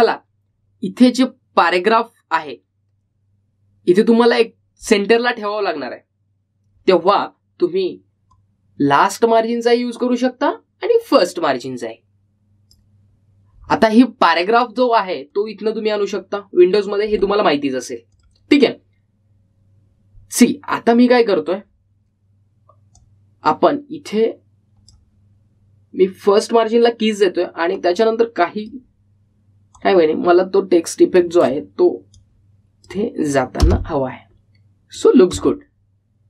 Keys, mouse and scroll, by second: 0.8 ctrl+z, 6.0 click, 9.5-16.2 drag, 16.5 click, 19.3 click, 24.1-34.7 drag, 34.7 space.